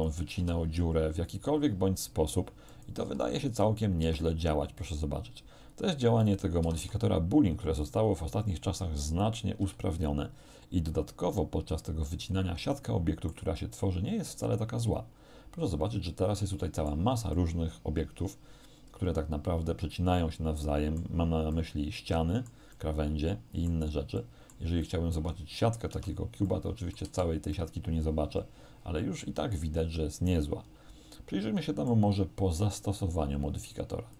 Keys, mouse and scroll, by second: 0.0 right click, 0.0 click, 0.3 r, 2.8 click, 3.1 s, 3.6 click, 4.0 r, 6.2 click, 6.7 r, 9.2 click, 9.6 g, 12.2 click, 12.8 middle click, 15.8-17.1 middle drag, 17.4-21.2 middle drag, 21.6-22.7 middle drag, 24.2 middle click, 24.9 right click, 25.2 Tab, 26.0 Tab, 26.5 middle click, 27.1 z, 27.6-32.1 middle drag.